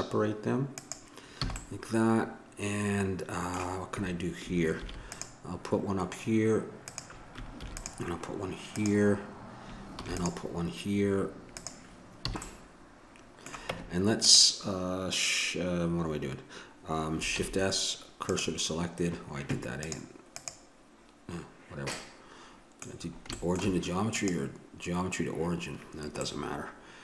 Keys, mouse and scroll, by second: 1.4 a, 2.2 middle click, 3.3 middle click, 4.8 ctrl+r, 7.6 ctrl+r, 10.0 ctrl+r, 12.2 a, 12.4 middle click, 13.7 Tab, 17.3 shift+s, 20.4 click, 22.0-23.1 middle drag, 24.1-25.9 middle drag, 25.9 click.